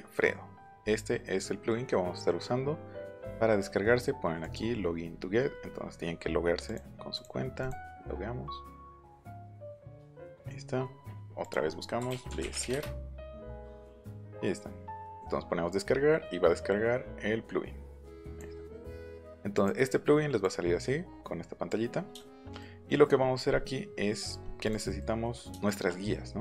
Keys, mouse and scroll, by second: 4.4 click, 6.6 click, 7.1 click, 7.6 click, 11.4 click, 11.7-13.1 typing, 14.1-14.9 scroll down 1, 15.0 click, 18.2 click, 19.5 click, 20.4-21.6 drag, 24.6 click, 25.7 shift+middle click.